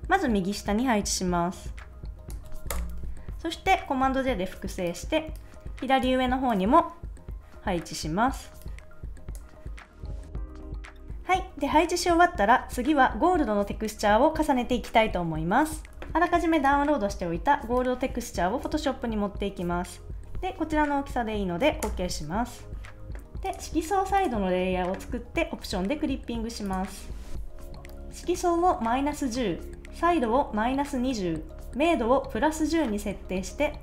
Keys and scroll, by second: 2.7 Return, 3.9 super+j, 10.2 Return, 10.3 shift+Down, 10.4 shift+Left, 10.5 shift+Up, 10.7 Right, 10.9 super+s, 16.0 a, 21.9 Return.